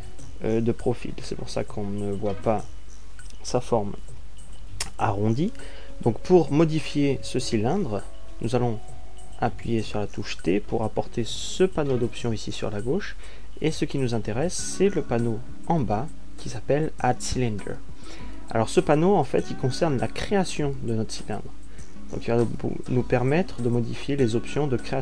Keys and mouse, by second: 11.6 t, 24.1-25.0 middle drag.